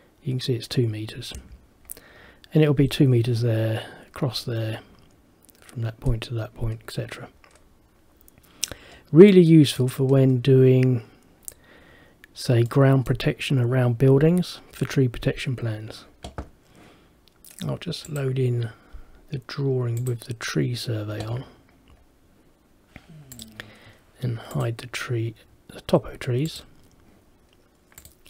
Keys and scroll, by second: 1.4 Escape.